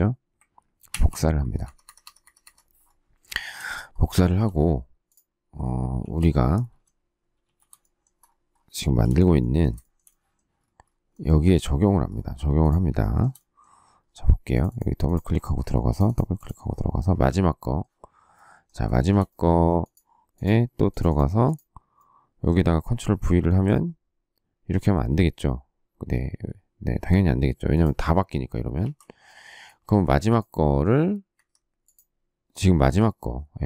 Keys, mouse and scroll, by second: 0.8 ctrl+c, 1.3 Escape, 1.5 Escape, 4.1 shift+middle click, 4.3 shift+middle click, 5.9 shift+c, 7.3 shift+a, 8.8 shift+z, 9.7 shift+middle click, 12.9 shift+middle click, 18.8 shift+middle click, 23.3 ctrl+v, 28.8 ctrl+z, 29.4 space, 29.7 space, 31.2 Escape.